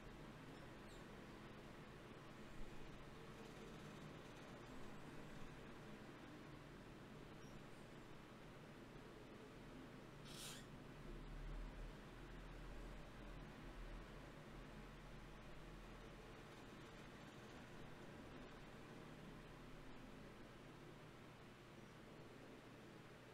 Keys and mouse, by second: 0.7 KP_1, 1.5 s, 3.3 KP_3, 3.9 g, 5.5 s, 6.9 g, 8.7 g, 10.1 s, 10.5 g, 12.3 KP_3, 14.3 r, 15.3 g, 17.8 click, 19.4-20.8 middle drag, 20.8-23.3 drag.